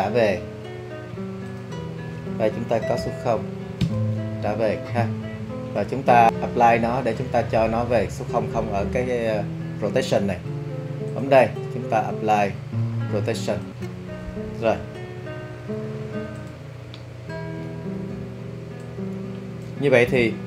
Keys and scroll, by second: 3.0 0, 3.8 Return.